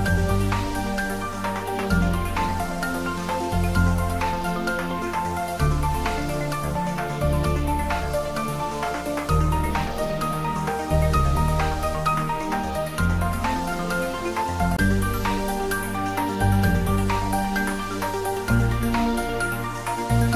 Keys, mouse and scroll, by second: 3.0 click, 11.2 click, 15.8 click, 15.9 click.